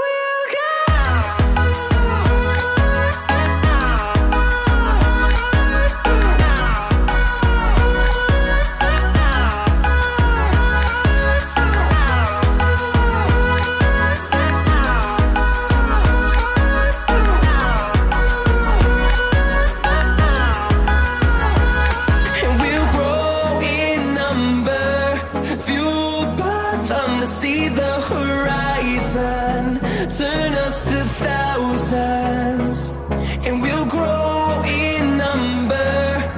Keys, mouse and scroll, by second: 6.5 scroll up 1, 7.3-9.0 drag, 9.0-10.5 scroll down 1, 10.5-13.8 drag, 13.8 ctrl+right click, 16.4 ctrl+d, 18.7 ctrl+z, 21.3 ctrl+z, 21.4 ctrl+r, 24.4-26.4 scroll down 1, 26.4 click, 27.5-27.9 scroll down 1, 27.9-29.1 scroll up 1, 29.1 scroll, 29.1-29.9 scroll down 1, 29.9-31.9 scroll up 1, 31.9 F10, 32.4 click, 32.5 click, 35.0 right click, 35.9 click.